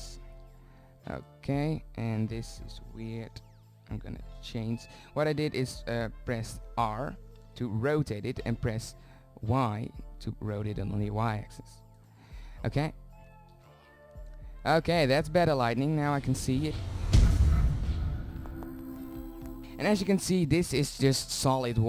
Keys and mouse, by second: 1.7 r, 3.5 click, 5.6 r, 12.3 shift+z, 20.1 middle click.